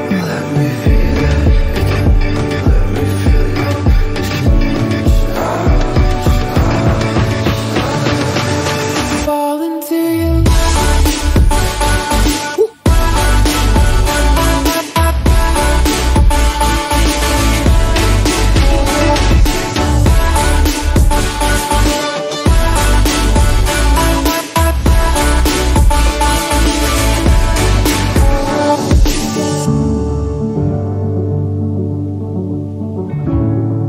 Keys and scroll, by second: 17.0 ctrl+j, 19.0 ctrl+t.